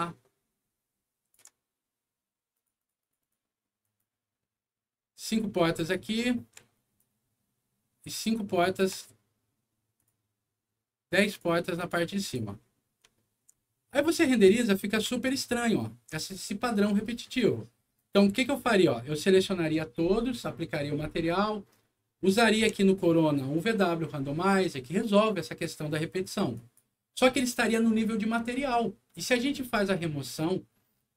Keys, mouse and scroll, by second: 2.5 shift+click, 2.7 shift+click, 2.9 shift+click, 3.1 shift+click, 3.7 shift+click, 4.8 scroll down 1, 5.6 click, 6.1 scroll up 1, 6.9-8.7 shift+drag, 9.9 shift+click, 11.1 shift+click, 11.7 shift+click, 12.2 click, 12.5 middle click, 13.1 alt+middle click, 13.8 alt+middle click, 14.4 alt+scroll up 1, 15.1 alt+middle click, 16.2 alt+scroll down 2, 17.2 alt+scroll down 2, 17.9-19.2 alt+drag, 22.2 middle click, 22.5 m, 26.5 click, 30.2 click.